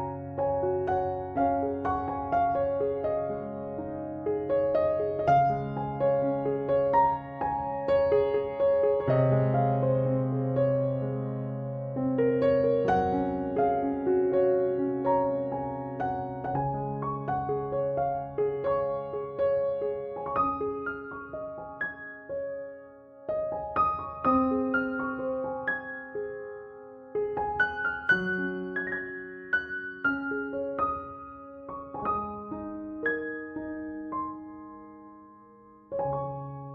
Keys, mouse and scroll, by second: 0.3 Tab, 2.1 click, 3.4 click, 4.5 Tab, 5.2 click, 6.6 shift+click, 7.4 scroll down 3, 7.6 ctrl+s, 8.1-8.6 scroll up 5, 8.2 Tab, 8.4-9.8 typing, 8.7 click, 8.8 scroll down 1, 9.1 click, 9.2 scroll up 1, 9.2 scroll down 13, 9.4 click, 9.5 scroll up 6, 9.8 scroll down 5, 10.0 Tab, 10.1 click, 10.2 shift+click, 10.3 ctrl+j, 10.4 click, 10.8 click, 10.8 click, 10.9 shift+click, 11.0 Tab, 11.2 b, 11.3 scroll down 7, 11.4 click, 11.6 b, 11.7 click, 11.9 b, 12.0 scroll down 11, 12.1 p, 12.3 Tab, 12.4 shift+click, 12.5 ctrl+j, 12.6 click, 12.7 click, 13.0 click.